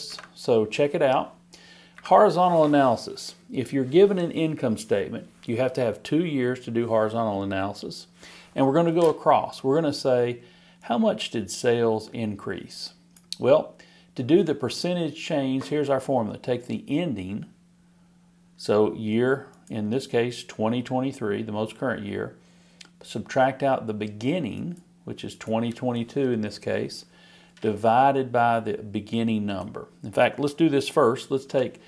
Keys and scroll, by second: 0.1 alt+Right.